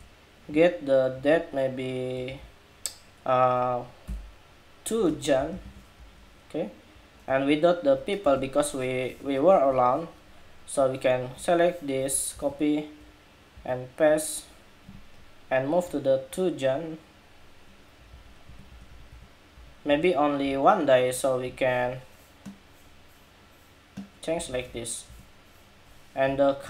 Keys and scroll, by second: 2.0 super+a, 5.7 Escape, 12.0 super+c, 13.3 super+v.